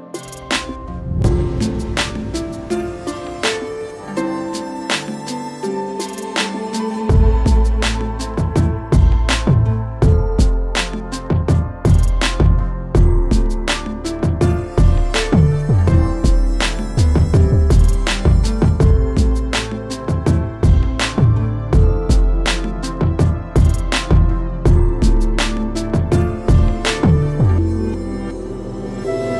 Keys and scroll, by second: 2.4 space, 4.3 space, 6.0 ctrl+g, 10.1 shift+Return, 14.7 alt+shift+Return.